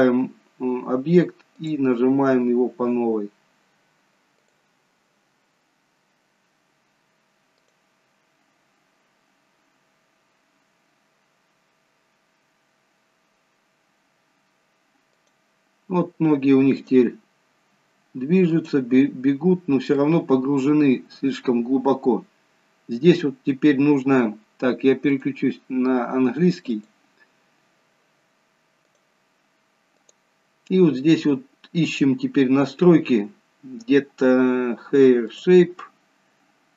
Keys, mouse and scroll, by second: 1.5 click, 5.9-6.5 scroll up 5, 7.9 click, 15.3 click, 17.1 click, 18.7 click, 19.7-20.3 scroll down 2, 20.3 middle click, 21.6 scroll up 2, 25.4 click, 31.3 scroll down 3, 32.4 scroll down 3, 35.5 click.